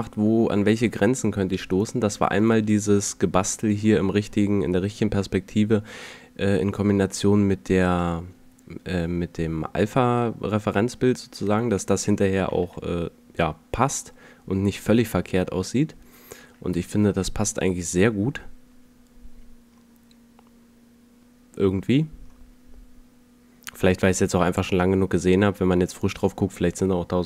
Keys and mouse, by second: 8.0-9.7 drag, 15.8 F11, 26.1 F11.